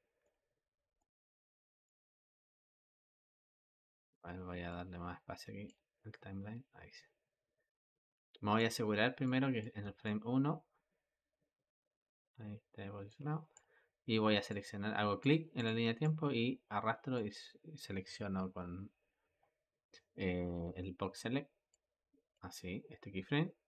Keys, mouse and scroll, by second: 0.1-1.7 middle drag, 1.7 click, 2.0-4.6 middle drag, 4.6-5.9 drag, 5.9-9.1 shift+middle drag, 9.1-9.9 drag, 9.9-12.9 shift+middle drag, 13.4 click, 14.4 click, 15.4 click, 15.9 click, 21.6 click.